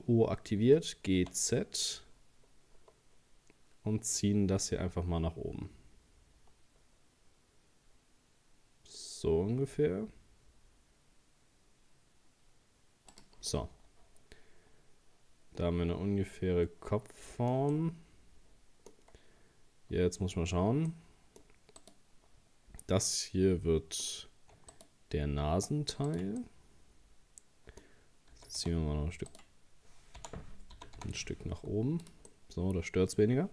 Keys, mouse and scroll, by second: 0.6 g, 13.5-16.6 middle drag, 17.7-19.1 middle drag, 19.1-19.5 scroll up 1, 20.5-20.9 scroll up 2, 20.9 middle click, 21.8 right click, 23.1-24.7 middle drag, 24.7 shift+right click, 26.1 right click, 26.4-28.3 middle drag, 28.3 g, 30.2 o, 30.8 g, 32.3-33.5 middle drag.